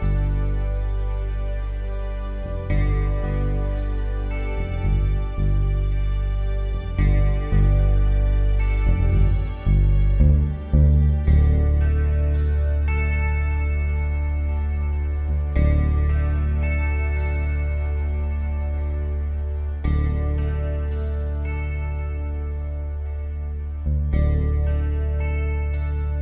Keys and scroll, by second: 0.7 space, 4.6 ctrl+z, 15.6 typing, 24.3-26.0 typing, 26.1 Return.